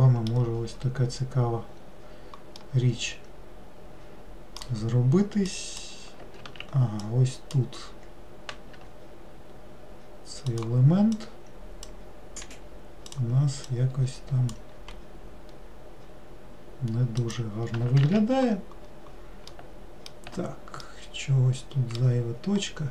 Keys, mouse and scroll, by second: 1.7-2.0 scroll down 2, 2.8-5.7 middle drag, 5.7 click, 11.3 click, 13.2 click, 13.8 click, 14.9 g, 19.0-19.7 scroll down 1, 19.7 alt+middle click, 21.0-22.7 middle drag, 22.7-22.9 scroll up 2.